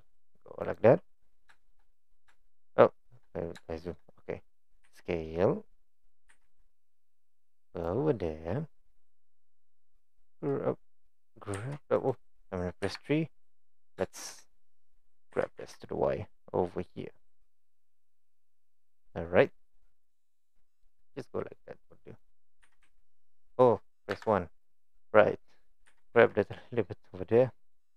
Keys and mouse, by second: 1.6 shift+middle drag, 2.4 shift+middle click, 3.7 shift+middle click, 4.9 s, 6.3 g, 8.8 click, 9.1-9.9 middle drag, 11.1 click, 11.6 g, 12.9 KP_3, 15.3 g, 19.5 click, 20.1-21.6 middle drag, 22.2 click, 22.7 g, 24.2 KP_1, 25.9 g.